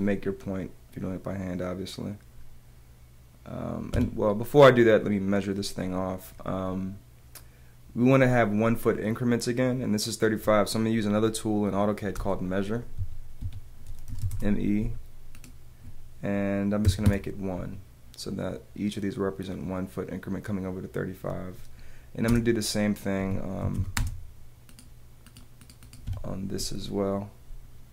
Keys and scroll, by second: 0.6 Return, 3.9 Escape, 12.1 space, 13.4 Escape, 14.3 Return, 15.3 Return, 16.8 l, 17.0 Return, 17.9 Return, 22.3 space, 23.2 Escape, 24.7 space, 24.9 space, 26.1 Escape.